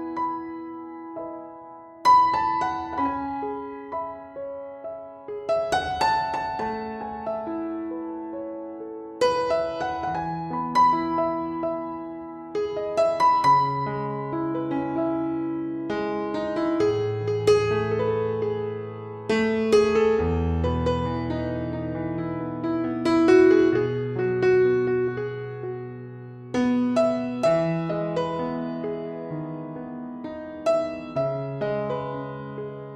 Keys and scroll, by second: 5.0 [, 13.9 super+-, 14.1 super+0, 14.3 super+s, 18.1 super+s, 19.3 Left, 19.4 Right, 20.3 f, 21.3 f, 22.9 Up, 23.6 Up, 25.0 Up, 25.5 Up, 25.9 Down, 26.9 Down, 27.8 f, 32.6 f.